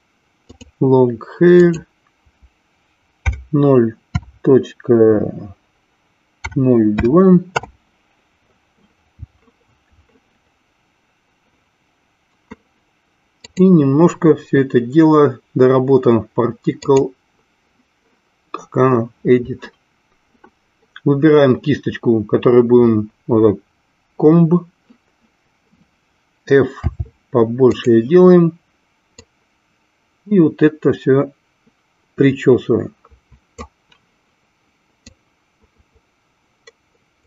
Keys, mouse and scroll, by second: 0.9 click, 2.0-8.7 drag, 13.4-17.3 drag, 26.7 f, 29.3-33.8 drag, 35.3-37.2 drag.